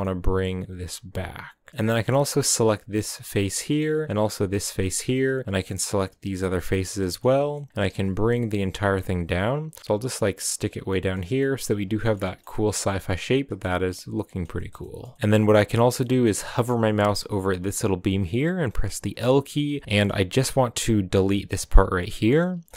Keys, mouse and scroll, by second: 1.7-2.9 middle drag, 2.9 right click, 3.3-4.5 shift+middle drag, 4.5 shift+right click, 4.9 scroll down 3, 5.4 shift+right click, 5.9 shift+right click, 6.2 scroll down 4, 6.4-7.7 middle drag, 7.7 g, 10.8 scroll down 1, 10.9 middle click, 11.3 g, 12.0-15.2 shift+middle drag, 15.2-15.8 scroll up 3, 15.8 scroll down 1, 16.0 middle click, 16.6-19.1 scroll up 1, 19.1 l, 19.3 scroll down 2, 19.5 middle click, 20.1-22.2 scroll up 2, 22.2 scroll down 2, 22.4-22.7 shift+middle drag.